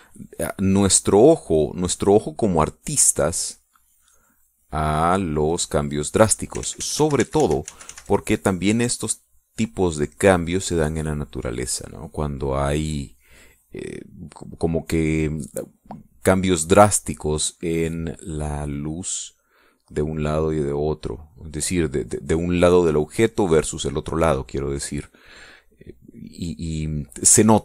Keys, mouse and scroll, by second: 0.2-6.1 drag, 7.7 ctrl+z, 9.6-12.0 ctrl+drag, 12.2 ctrl+click, 12.8-14.6 ctrl+drag, 17.0 click, 18.0-22.3 drag, 22.8 middle click, 24.4-27.6 drag.